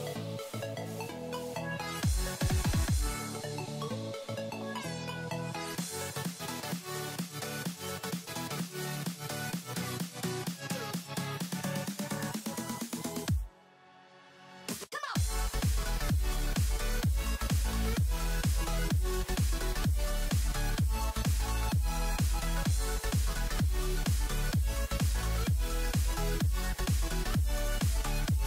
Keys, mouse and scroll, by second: 1.2 ctrl+z, 2.0 click, 3.2 right click, 5.6 click, 11.6 Down, 12.1 typing, 13.1 click, 17.7 typing, 18.7 click, 20.4 v, 21.0 click, 22.1 shift+click, 22.6 click.